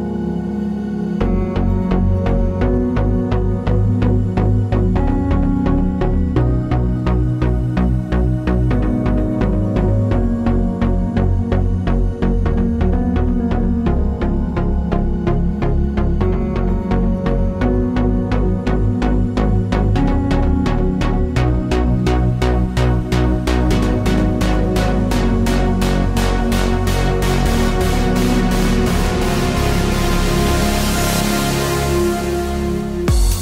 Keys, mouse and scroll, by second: 0.2 Return, 1.4 click, 2.0 KP_4, 2.1 KP_0, 2.2 Return, 3.5 click, 4.2 v, 5.0 click, 5.9 ctrl+d, 8.8 click, 12.0 click, 14.8 t, 15.4 click, 16.0 BackSpace, 17.5 click, 20.4 t, 20.8 click, 22.3 shift+5, 23.1 ctrl+a, 23.8 click, 25.0 Right, 25.4 BackSpace, 28.7 click, 29.2 KP_Enter, 30.3 click.